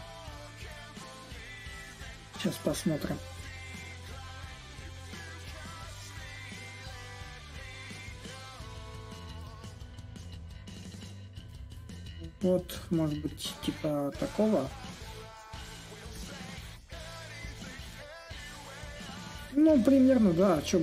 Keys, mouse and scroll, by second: 5.3-10.4 drag, 10.6-15.7 drag, 15.8-20.8 drag.